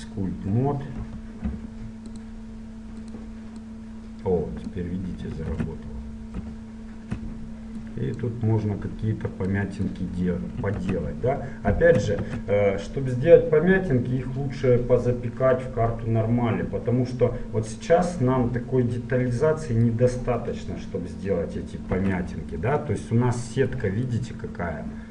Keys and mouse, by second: 1.1 Right, 5.3 click, 5.7 ctrl+z, 6.6 KP_1, 7.2 middle click, 8.0-11.6 drag, 10.9 ctrl+z, 12.4 ctrl+z, 17.6-21.3 middle drag, 22.2 z, 22.4 click, 23.3-25.1 middle drag.